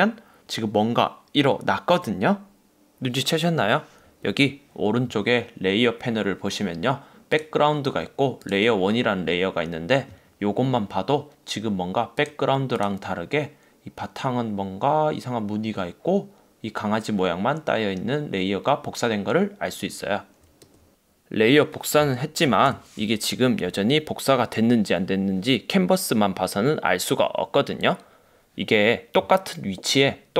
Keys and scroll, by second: 22.8 super+-.